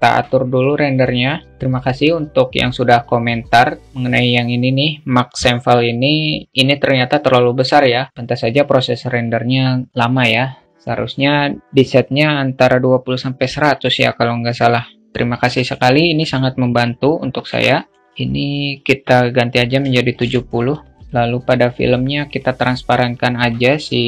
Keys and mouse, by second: 0.4-24.0 drag.